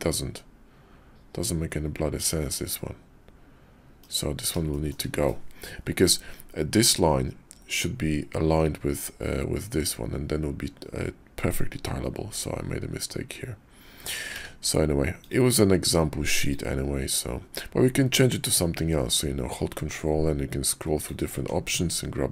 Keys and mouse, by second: 4.7 shift+click, 14.2 d, 21.5 Tab.